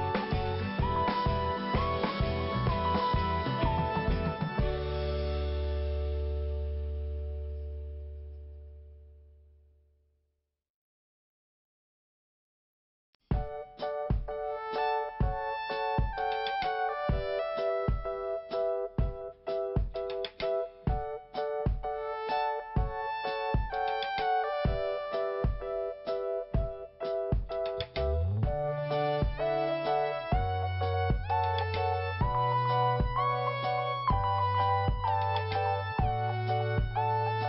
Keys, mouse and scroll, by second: 0.3 scroll up 1, 1.2 scroll down 1, 2.7 Delete, 4.0 click, 7.4 click, 11.3 click, 12.4 click, 12.5 click, 13.1 5, 14.9 click, 15.0 click, 16.1 click, 20.2 click, 20.3 click, 20.9 click, 21.0 click, 21.1 click, 21.2 click, 23.8 click, 27.7 click, 27.8 click, 27.9 click, 28.0 double click, 28.7 double click, 31.1 click, 32.5 click, 32.6 click, 34.0 click.